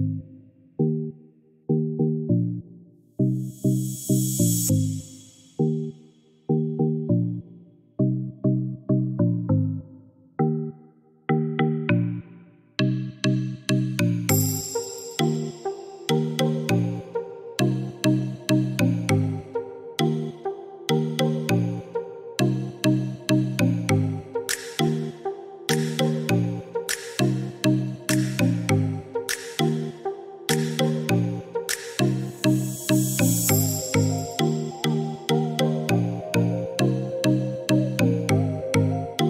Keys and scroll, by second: 11.3-12.2 typing.